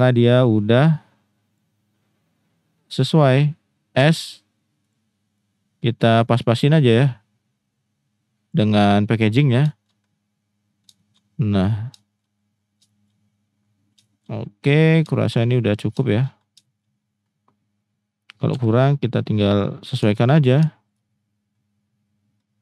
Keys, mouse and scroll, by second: 0.7-1.6 drag, 4.0 s, 4.8 click, 5.4 click, 7.0-8.5 drag, 9.7 shift+drag, 11.0 shift+drag, 12.0 shift+drag, 12.9 shift+middle drag, 14.0 shift+drag, 15.1 shift+click, 16.0 shift+drag, 16.6 shift+drag, 18.5 g, 19.5 click, 20.1 shift+drag, 20.6 shift+drag.